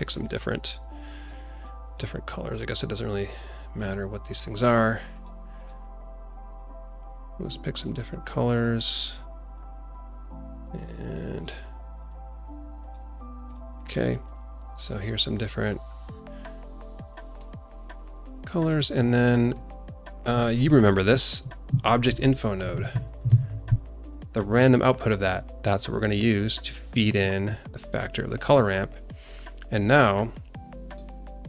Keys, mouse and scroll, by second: 0.1 click, 4.3 click, 5.1 click, 5.5 click, 7.8 click, 8.5 click, 10.8 click, 11.3 click, 13.7 click, 14.5 click, 15.4 click, 16.6 click, 17.7 click, 18.2-19.1 scroll down 4, 19.5 click, 19.9 click, 20.7 scroll down 2, 21.1 shift+middle click, 21.8 ctrl+shift+a, 24.3 scroll up 2, 25.1 click, 25.8-27.2 drag, 27.9 click, 28.5 scroll up 1, 28.8-29.8 scroll down 4, 30.8 scroll down 2.